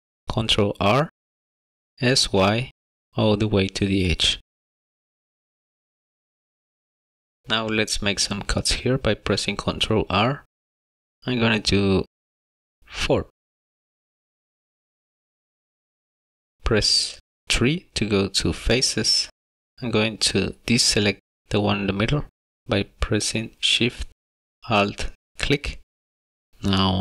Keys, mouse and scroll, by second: 2.5 s, 6.1 middle click, 6.8 middle click, 7.8 ctrl+r, 18.2 3, 25.2 alt+shift+click, 26.5 shift+middle click, 26.5 scroll up 2.